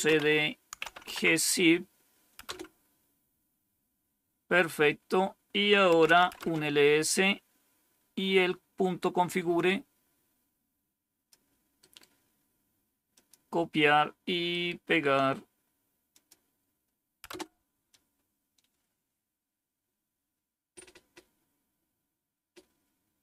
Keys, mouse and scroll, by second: 0.0-2.8 typing, 5.6-6.5 typing, 9.4-11.2 drag, 11.7 right click, 12.3 right click, 13.0 click, 14.3 right click, 16.0 click, 17.2 Return.